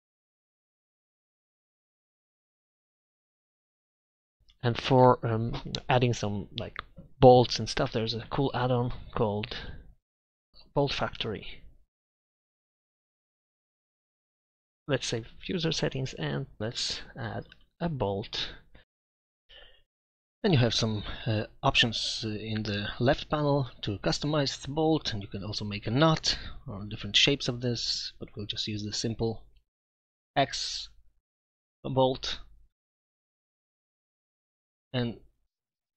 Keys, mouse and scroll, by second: 1.5 Tab, 1.8 Tab, 16.2-16.6 middle drag, 16.6 shift+a, 21.6 z, 26.6-27.2 drag, 27.7-30.3 middle drag, 35.4 KP_Divide, 35.4 Tab, 35.4 KP_1, 35.4 KP_5, 35.8 b.